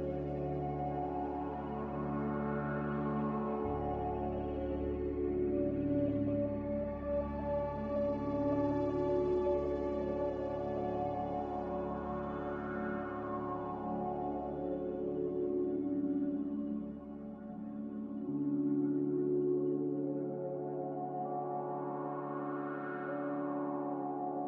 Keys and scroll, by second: 9.4 z, 15.4 c, 19.7 a, 22.6 z.